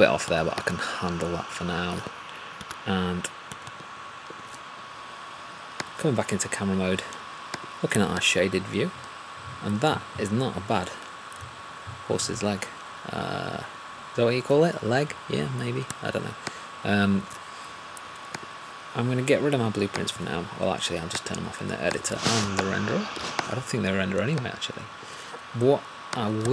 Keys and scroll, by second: 2.5 1.